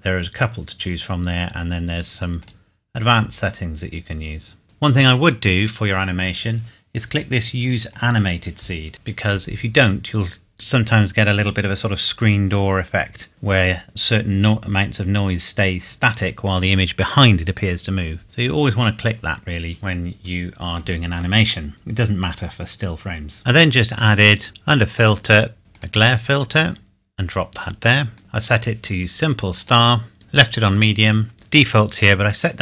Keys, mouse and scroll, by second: 2.4 click, 7.9 click, 24.0 click, 25.7 click, 28.1 click.